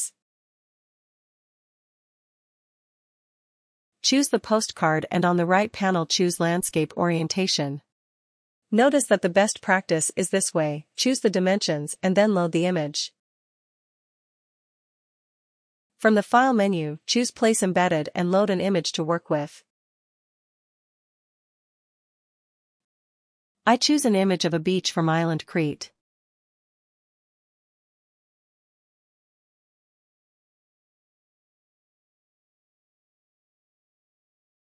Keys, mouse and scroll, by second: 1.1-6.1 drag, 6.8-23.3 drag, 26.1 click, 26.3 click, 33.1 click.